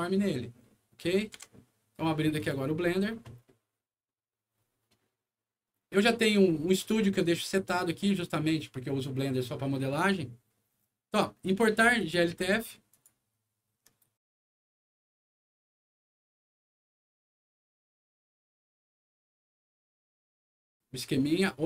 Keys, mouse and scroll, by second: 2.3 click, 6.7 click, 7.4 right click, 11.9 click, 12.9 click, 14.4 click, 15.6 click, 15.8 click, 20.8 z.